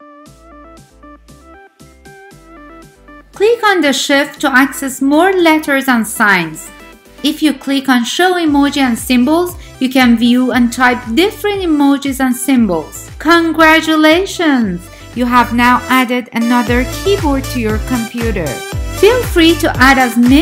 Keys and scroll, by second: 14.8-20.4 typing.